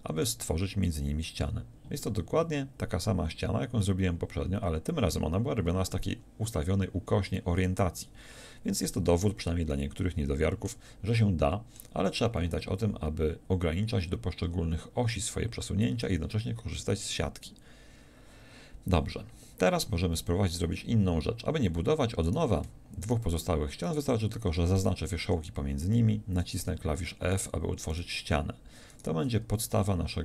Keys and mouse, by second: 0.2 f, 2.1-4.4 drag, 9.8 click, 25.2 f, 29.4 f, 29.8 a.